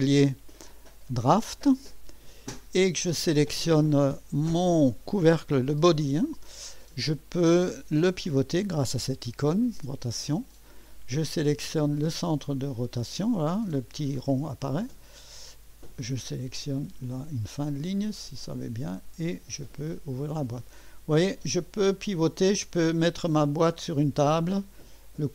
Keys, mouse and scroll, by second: 0.2 click, 1.2 click, 2.9-3.6 typing, 5.4 click, 5.5-6.4 typing, 8.1-8.8 typing, 9.8 click, 14.5 click, 18.4 click, 23.9-25.3 right drag.